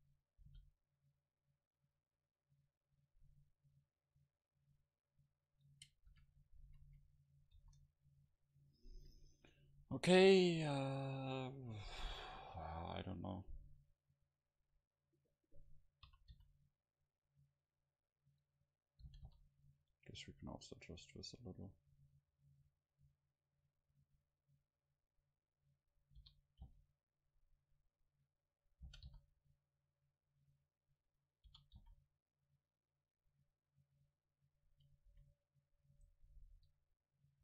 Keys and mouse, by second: 0.5 g, 2.0-3.8 drag, 6.2 a, 6.7 a, 6.9 a, 7.6 ctrl+s, 15.2-17.1 right drag, 16.1 r, 18.6-20.4 drag, 19.1 g, 23.8-25.6 drag, 26.3 r, 28.5-30.1 drag, 28.9 g, 31.0-32.9 drag, 31.5 r, 34.7-36.3 drag, 35.1 a, 36.0 right click, 36.3 middle click, 36.4-37.4 right drag.